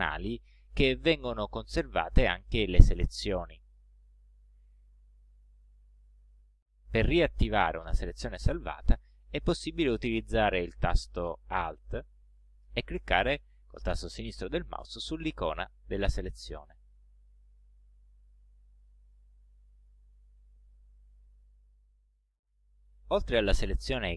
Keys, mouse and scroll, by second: 15.7 alt+click, 18.9 click.